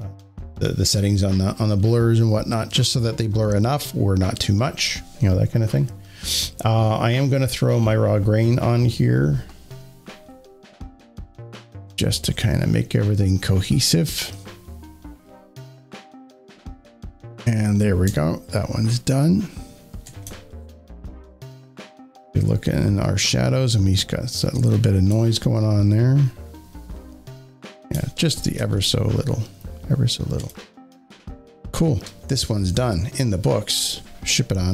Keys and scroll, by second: 18.9 z, 20.1 space, 20.2 space, 20.4 space, 27.8-29.0 typing, 30.4 space.